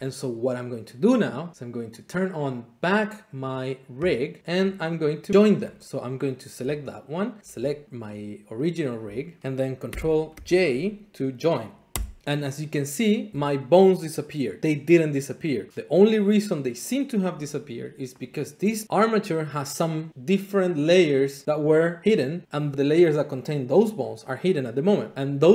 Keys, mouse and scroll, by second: 4.1 click, 4.4 scroll, 4.5 shift+middle click, 5.0 click, 7.4 shift+click, 7.8 click, 8.1 click, 8.6 click, 9.4 shift+click, 9.8 ctrl+p, 10.3 Escape, 11.9 ctrl+j, 15.5 middle click, 16.2 middle click, 18.3 click, 19.2 middle click.